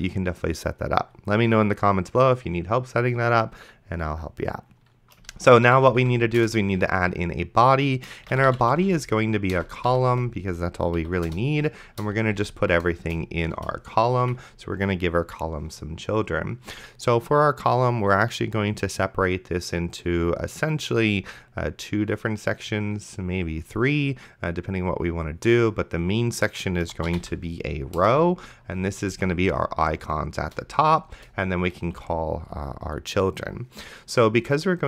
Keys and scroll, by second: 5.4-6.5 typing, 8.1-10.6 typing, 11.0 Down, 11.3 Return, 12.4 c, 13.1 Return, 14.2 Escape, 26.8-27.8 typing, 28.0 Return, 29.1 c, 30.4 Return, 32.0 Escape.